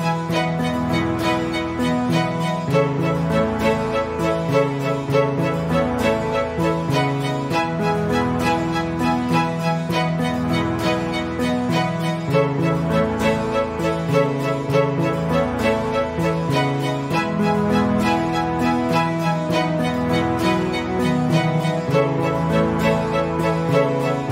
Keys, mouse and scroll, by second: 0.3 ctrl+alt+v, 1.1 click, 1.8 ctrl+alt+v, 2.2 click, 2.8 ctrl+alt+v, 3.1 click, 3.6 ctrl+scroll up 1, 5.1 click, 6.9 click, 7.3 ctrl+z, 8.9 click, 9.9-10.2 click, 10.6 Delete, 11.8 click, 13.3 Return, 14.5 click, 18.3 Delete, 20.5 Return, 21.1 click, 23.8 Delete.